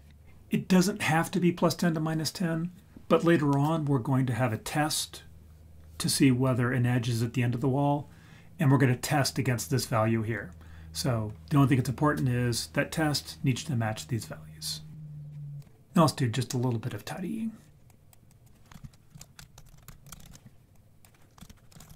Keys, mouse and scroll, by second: 17.6-18.1 scroll down 3, 17.9 click, 18.3 click, 18.7 ctrl+j, 18.8 F2, 20.2 l, 20.5 scroll down 2, 20.7 drag, 21.4 ctrl+j, 21.4 F2.